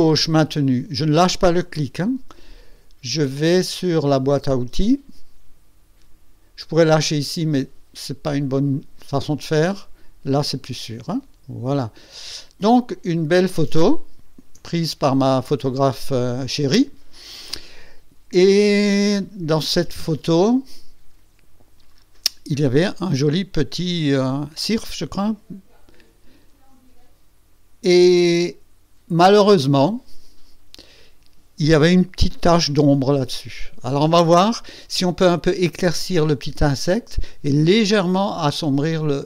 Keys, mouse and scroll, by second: 13.9 ctrl+scroll down 2.